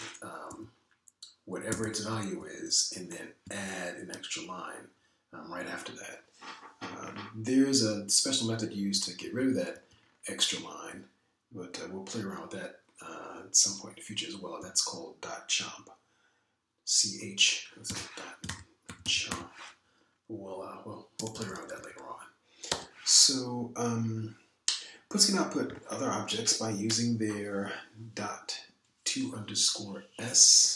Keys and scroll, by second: 0.6 BackSpace, 1.5 Up, 2.7 Right, 2.8 Right, 3.3 Right, 4.4 Down, 9.7 Down, 10.2 Down, 10.6 Down, 15.6 Up, 18.9-20.7 typing, 21.9-23.2 typing.